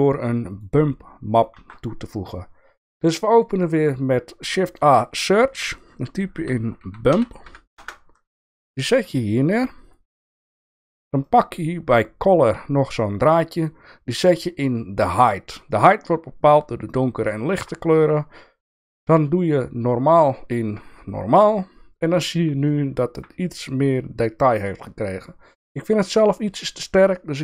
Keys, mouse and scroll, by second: 0.5 click, 1.5 shift+a, 10.1 shift+middle click, 11.3-15.3 drag, 15.7-17.6 shift+middle drag, 18.8-21.4 drag, 22.6 shift+middle click, 26.4-27.4 drag.